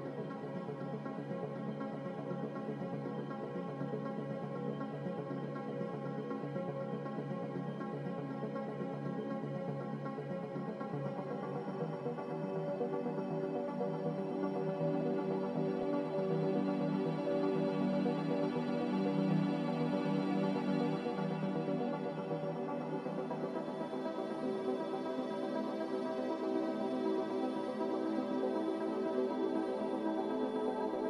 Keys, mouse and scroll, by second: 28.1 a.